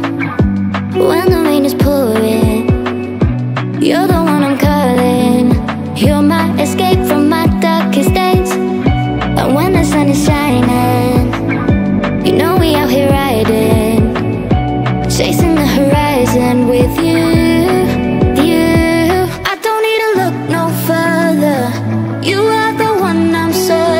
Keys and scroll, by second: 12.7 o.